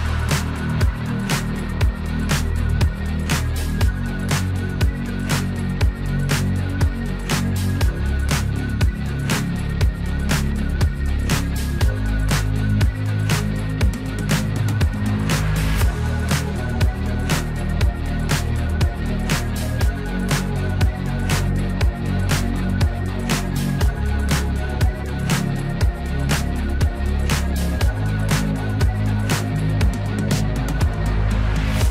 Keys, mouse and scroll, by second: 3.4 s, 4.4-19.6 drag, 6.4 typing, 21.8 click, 22.9 ctrl+shift+d, 24.3-31.9 drag.